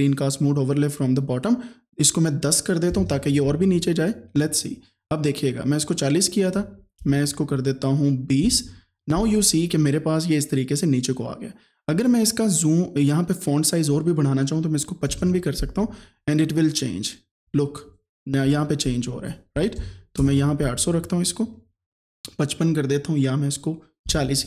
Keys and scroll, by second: 2.9 KP_1, 3.0 KP_0, 6.6 BackSpace, 8.5 KP_2, 8.6 KP_0, 15.1 KP_5, 15.2 KP_5, 17.5 space, 18.5 BackSpace, 20.2 KP_0, 24.1 KP_4, 24.3 KP_0.